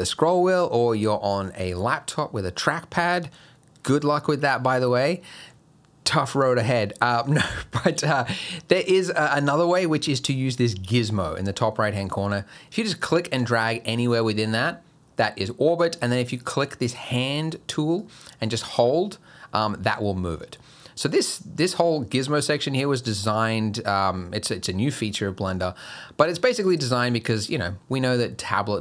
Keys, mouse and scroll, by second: 12.3 click, 18.0 click, 22.4 click, 23.9 click, 25.5 click.